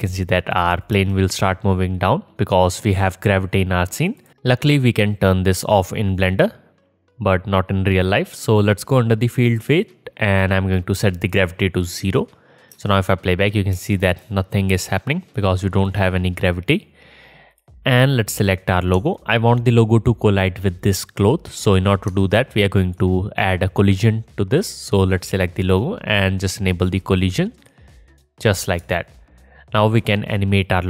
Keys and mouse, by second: 1.0 space, 4.3-9.6 middle drag, 9.6-17.6 drag, 12.8 space, 13.8 space, 17.6-27.2 middle drag, 27.2-30.8 drag.